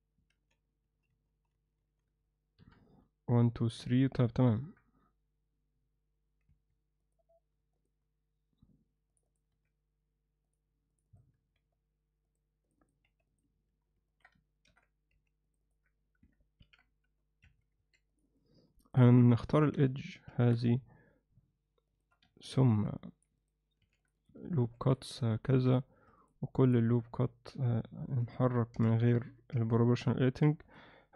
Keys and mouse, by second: 0.3-2.0 ctrl+z, 2.6 KP_1, 4.6 KP_7, 6.5 1, 7.0 click, 7.8 shift+click, 9.1 click, 9.3 click, 9.5 x, 10.9 click, 11.5 x, 12.6 click, 12.8 click, 13.0 x, 14.1 ctrl+alt+middle click, 14.7 ctrl+r, 16.6 ctrl+b, 17.8 2, 18.1 click, 18.3 click, 18.9 click, 19.5 shift+click, 20.2 ctrl+b, 22.5 ctrl+r, 25.5 1, 26.2 shift+click, 27.5 g, 28.7 o, 29.5 g.